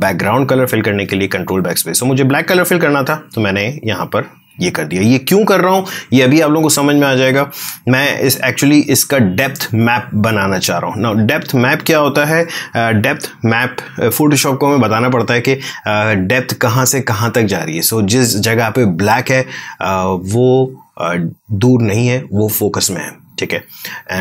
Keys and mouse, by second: 1.0 space, 1.2 click, 1.5 space, 2.9 click, 3.1 space, 10.8 click.